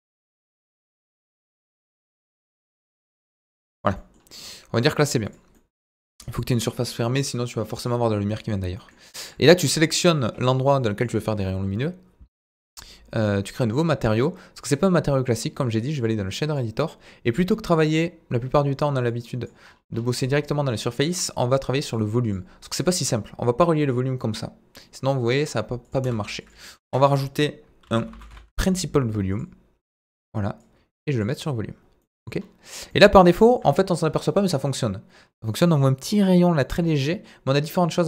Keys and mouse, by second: 1.8 g, 2.4 click, 3.2 Tab, 9.3 click, 13.6 click, 16.4-38.0 drag.